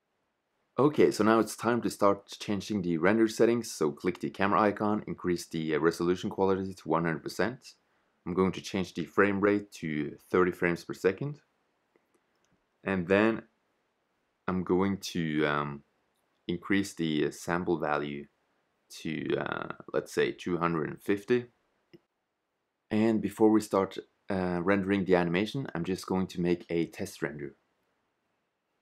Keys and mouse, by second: 0.4 shift+z, 28.7 click.